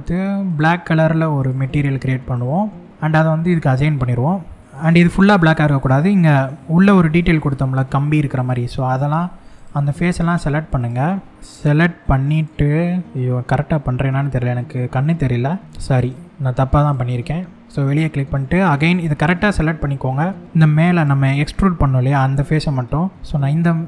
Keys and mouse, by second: 0.1 drag, 3.4 click, 4.4 middle click, 5.9-7.2 middle drag, 8.0 click, 9.7 shift+click, 10.4 shift+click, 11.0 shift+click, 13.4-14.6 middle drag, 15.6 shift+click, 16.5 click, 17.2 click, 17.4 click, 17.5 middle click, 20.5 shift+click, 21.2-22.9 middle drag, 23.7 click.